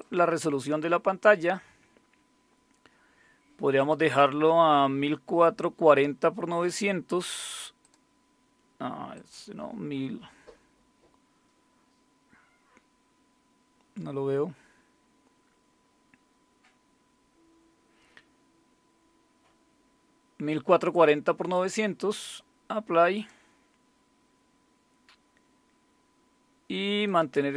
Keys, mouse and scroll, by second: 0.0 click, 3.8 click, 7.8 click, 8.2 click, 9.1 click, 10.9-12.1 scroll down 1, 14.0-20.9 scroll down 1, 20.9 click, 23.1 click, 27.0 click.